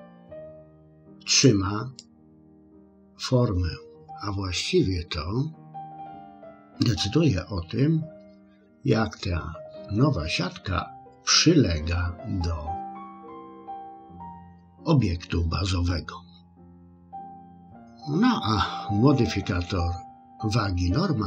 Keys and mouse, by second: 0.0 click, 1.3 click, 2.0 click, 17.0 click.